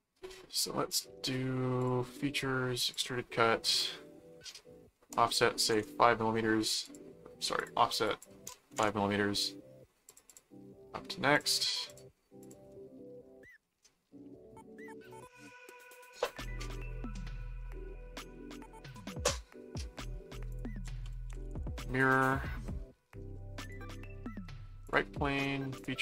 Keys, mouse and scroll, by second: 0.9 click, 1.8 click, 2.9 click, 6.8 click, 7.6 click, 10.1 click, 11.3-13.0 drag, 12.7-15.5 middle drag, 18.9-20.3 middle drag, 20.5 click, 20.6-22.0 typing, 22.2 Return, 23.7 click, 24.8 click, 25.7 click.